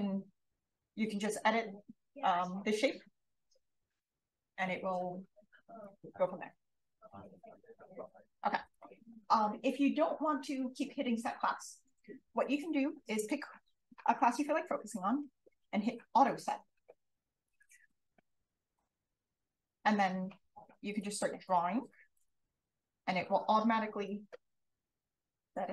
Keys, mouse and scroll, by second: 13.2 click, 19.2-21.4 drag, 22.2 click.